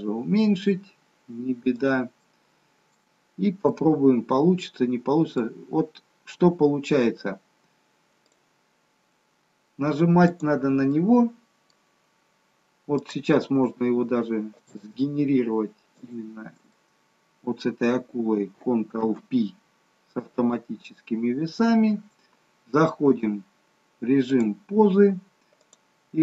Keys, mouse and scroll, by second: 2.3 middle click, 3.3-4.0 scroll up 2, 3.8 middle click, 8.4 click, 10.4 click, 11.0 middle click, 13.0 click, 14.7 shift+click, 16.0 shift+click, 16.9 middle click, 19.4 ctrl+p, 21.7 middle click, 23.2 click, 25.6 click.